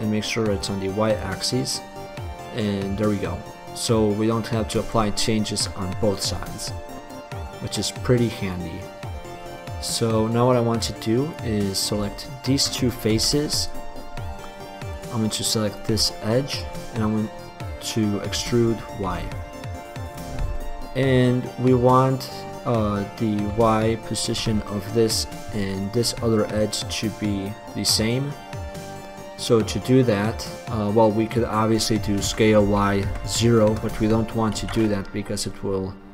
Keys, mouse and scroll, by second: 0.6-1.8 drag, 1.8-3.0 middle drag, 6.8-11.0 middle drag, 12.8-14.2 middle drag, 13.4 x, 16.3 middle click, 18.5 e, 20.8-22.3 drag, 28.0 click, 32.4 s, 34.7 ctrl+z.